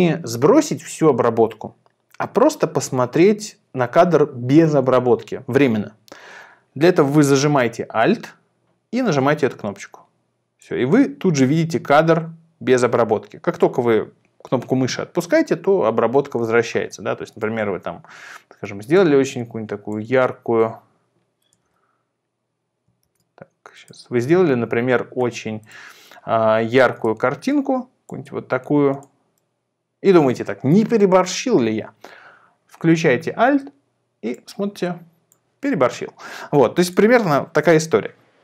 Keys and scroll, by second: 21.6 super+e, 23.0 super+r.